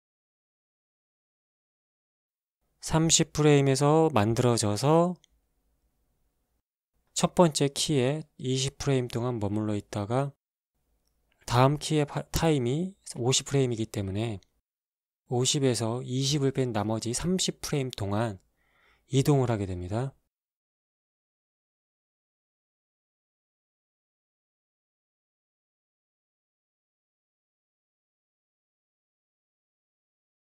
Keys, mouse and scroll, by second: 1.4 alt+a, 2.6-6.4 drag, 6.8-7.7 scroll down 1, 8.3 click, 10.5-12.3 drag, 13.5 click, 19.6-22.5 drag, 25.8 shift+Left, 26.3 alt+shift+a, 29.9 alt+a.